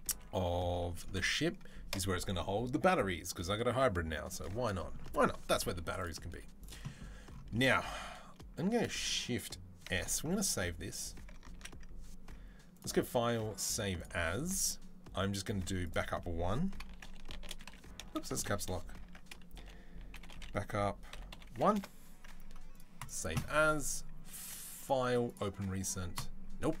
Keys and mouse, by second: 6.2 z, 10.0 ctrl+s, 11.4 ctrl+s, 12.6-26.8 drag.